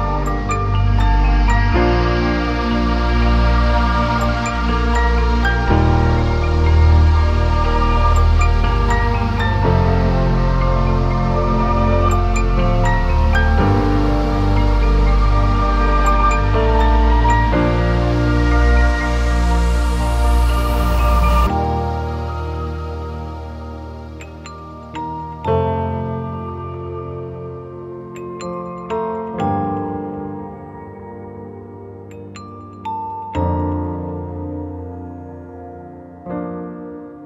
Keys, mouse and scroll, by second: 0.2 scroll down 4, 0.3 scroll up 1, 0.7 alt+a, 0.7-1.2 scroll down 1, 1.2 shift+middle click, 1.2 click, 1.5 middle click, 1.5 scroll up 2, 2.1 shift+middle click, 2.1 scroll up 1, 3.2 scroll down 2, 3.3 ctrl+space, 3.5-4.0 scroll up 1, 4.2 middle click, 4.3 alt+a, 4.4 click, 4.6 scroll up 1, 4.7-5.0 scroll down 1, 5.0 middle click, 5.7 scroll down 2, 5.9 Tab, 6.7 alt+z, 8.9 Tab, 9.0 alt+a, 9.2 click, 9.4 scroll down 1, 10.4 shift+middle click, 10.4 r, 10.9 middle click, 11.9 click, 12.1 KP_Decimal, 12.2-13.1 scroll up 6, 12.3 middle click, 13.6 click, 13.9 middle click, 14.1 click, 14.2 scroll down 2, 14.5 middle click, 15.5 click, 15.8 middle click, 15.9 scroll up 3, 16.3 middle click, 18.0 middle click, 18.8 s, 19.5 click, 19.6 ctrl+z, 19.7 scroll down 2, 20.1 middle click, 20.4 click, 20.5 scroll up 2, 20.7 middle click, 20.8 scroll down 1, 21.0 shift+middle click, 21.2 middle click, 21.5 shift+middle click, 23.6 click, 24.0 middle click, 24.1 shift+middle click, 24.2 scroll up 2, 24.4 middle click, 24.5 scroll down 1, 25.0 s, 25.5 middle click, 25.8 click, 25.8 scroll down 1, 26.4 middle click, 26.8 click, 27.0 alt+a, 27.1 scroll up 1, 27.9 middle click, 28.3 KP_0.